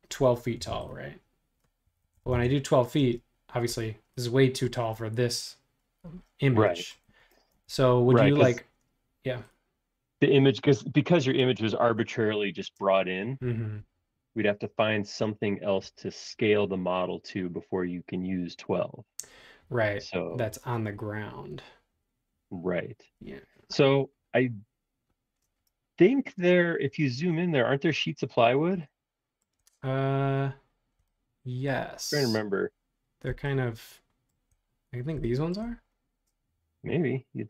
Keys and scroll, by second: 0.6 p, 1.6-3.0 typing, 7.7 super+z, 26.1 super+1.